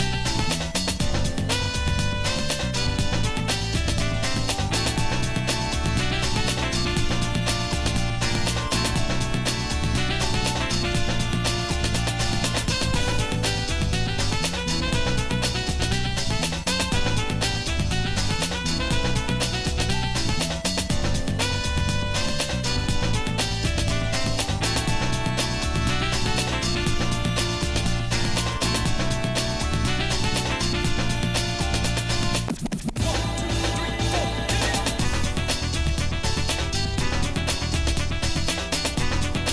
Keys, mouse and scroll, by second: 0.0 shift+middle click, 1.3 Tab, 1.6 middle click, 2.2 click, 3.5 g, 5.7 middle click, 6.6 click, 7.4 shift+click, 8.6 g, 11.6 shift+middle click, 12.2 click, 13.4 g, 17.1 click, 18.2 g, 20.6 shift+middle click, 21.3 middle click, 21.5 scroll down 1, 22.0 middle click, 22.5 shift+middle click, 23.8 middle click, 24.4 shift+middle click, 25.4 click, 26.0 shift+click, 27.0 click, 27.4 click, 28.0 shift+click, 28.6 shift+middle click, 31.8 g, 34.3 s, 37.1 g.